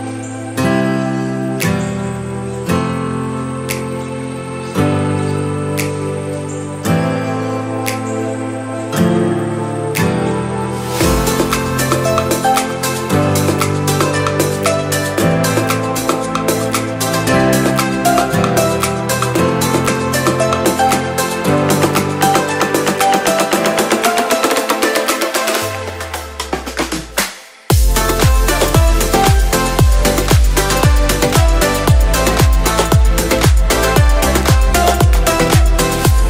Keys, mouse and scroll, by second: 0.0-0.8 shift+middle drag, 1.1-1.4 scroll down 2, 1.7 scroll down 1, 1.8-2.3 shift+middle drag, 4.4 shift+d, 5.0 z, 6.3 click, 7.9 shift+r, 8.4 shift+r, 9.2-9.7 scroll down 2, 10.0 scroll down 1, 10.1 shift+r, 10.5 shift+r, 18.2-20.7 drag, 21.7-24.2 drag, 24.9-27.1 drag, 28.3 scroll up 2, 29.6 click, 29.6 scroll up 1, 30.2 Tab, 31.0 click, 31.3 alt+click, 31.7-32.7 scroll up 3, 32.7-34.6 drag, 34.2 typing, 34.9-35.7 scroll down 2, 35.7 Tab, 36.0-36.2 scroll down 2.